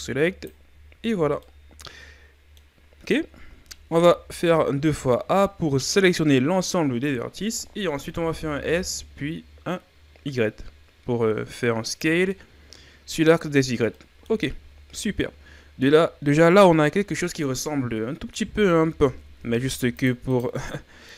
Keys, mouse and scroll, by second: 1.0 z, 1.2 scroll down 1, 1.5-3.7 middle drag, 3.7 a, 4.0 a, 8.0 s, 12.3-13.5 middle drag, 13.5-14.0 scroll up 2, 14.0 middle click, 14.5 Tab, 15.2-18.8 middle drag, 18.8 Tab, 19.4 ctrl+Tab, 20.3 right click, 20.7 middle click.